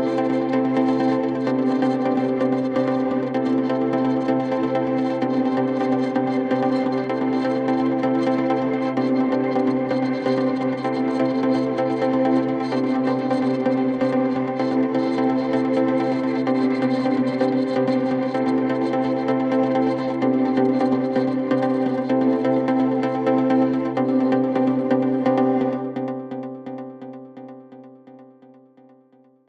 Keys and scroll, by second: 1.3 F3, 1.5 Escape, 6.8 shift+F2, 6.9 Escape, 13.8 Delete, 15.0 F3, 15.1 Escape, 20.7 shift+F2, 20.9 F3, 28.4 F3, 28.7 Escape.